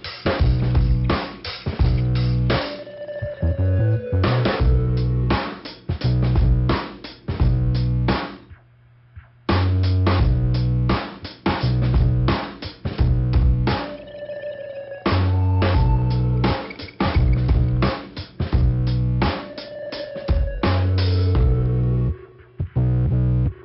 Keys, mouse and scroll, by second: 0.4 click, 0.5 middle click, 0.6 click, 1.1 scroll up 2, 1.8 click, 4.8 click, 5.7 click, 10.3 click, 11.8 click, 13.8 click, 14.5 click, 16.1 click, 17.3 click, 20.9 click, 23.3 click.